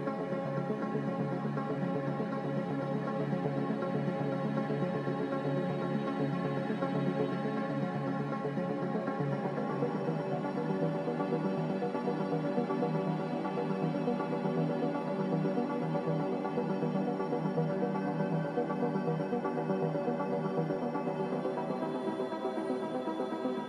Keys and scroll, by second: 10.7 s, 11.9-13.4 typing, 13.4 Return, 16.3 n, 17.5 m.